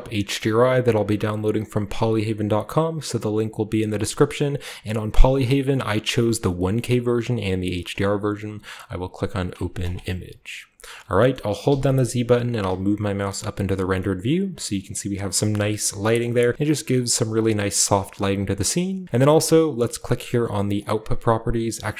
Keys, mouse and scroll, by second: 9.7-11.1 drag, 11.3 middle click, 11.6-12.3 typing, 13.7-15.5 scroll down 1, 15.2-16.0 shift+middle drag, 15.5-18.2 shift+scroll up 1, 16.2 shift+middle click, 16.4-18.2 shift+middle drag, 20.7 click, 21.2-21.9 scroll down 1.